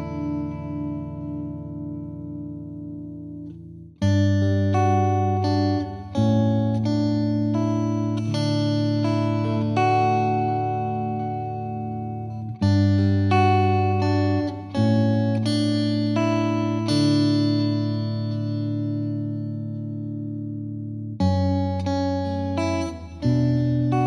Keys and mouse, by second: 3.5 click, 7.9 click, 11.9 click, 17.2 click, 20.8 click.